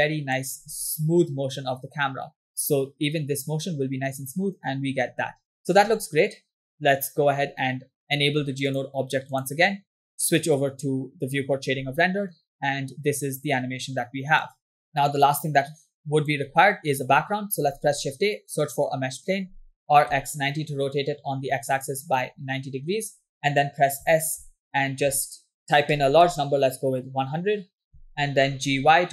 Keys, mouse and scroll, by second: 0.7 space, 5.1 space, 5.7 space, 5.8 space, 8.2 click, 9.2 click, 9.5 click, 10.8 click, 12.0 space, 14.0 space, 15.3-16.5 drag, 17.9 shift+a, 19.9 r, 24.1 s, 28.0 s, 28.6 g.